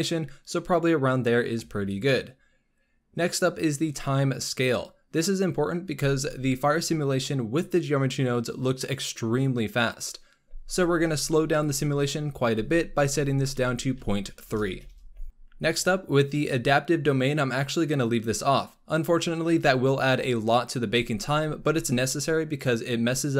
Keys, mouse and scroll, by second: 11.8-15.2 drag, 15.2 scroll up 4, 15.5-18.0 scroll down 4, 18.0-21.2 drag.